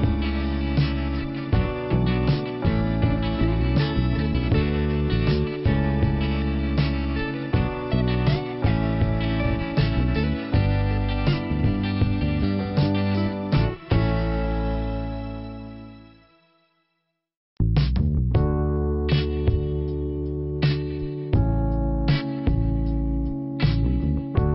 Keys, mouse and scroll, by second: 1.5 click, 2.4 scroll up 1, 3.2 click, 5.4 click, 6.8 click, 8.0 click, 12.0 click, 13.5 click, 16.5 click, 18.1 click, 19.0 click, 21.1 middle click, 23.2 click.